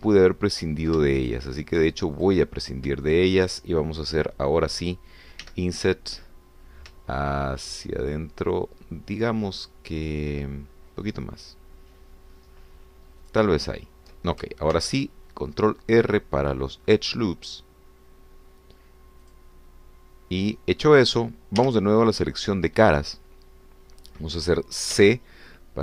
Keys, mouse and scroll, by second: 0.2 Escape, 1.3 ctrl+z, 2.2 ctrl+shift+click, 3.3 shift+click, 3.6 shift+click, 4.1 shift+click, 6.4 i, 14.2 shift+click, 15.7 ctrl+r, 16.5-17.2 scroll up 2, 17.9-19.1 scroll up 2, 21.5 click, 22.6 3.